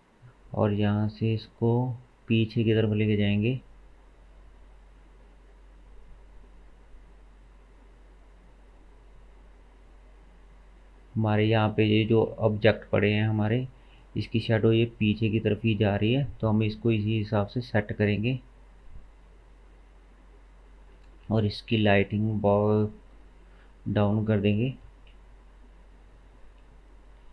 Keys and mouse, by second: 27.2-27.3 drag.